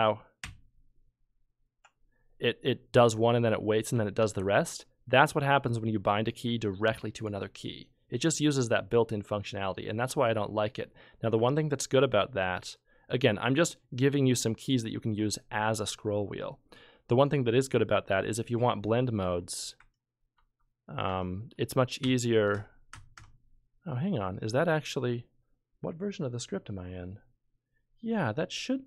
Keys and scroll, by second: 0.4 j, 4.2 z, 19.2 F12, 19.8 F12, 20.3 F11, 21.1 F11, 21.5 F12, 22.0 F12, 22.5 F12.